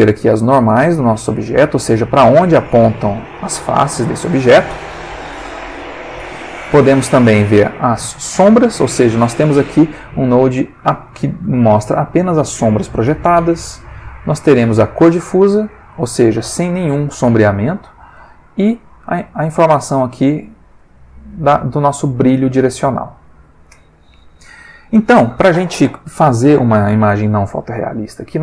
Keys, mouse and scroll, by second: 5.0 click, 6.0-7.8 drag, 13.9-15.0 drag, 16.5 middle click, 18.3-19.5 drag, 19.8-21.0 drag, 27.8 click.